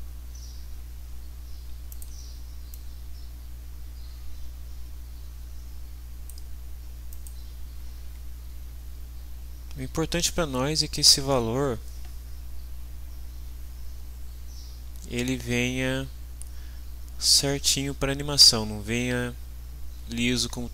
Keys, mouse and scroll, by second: 1.9 click, 2.8-6.5 drag, 7.1 click.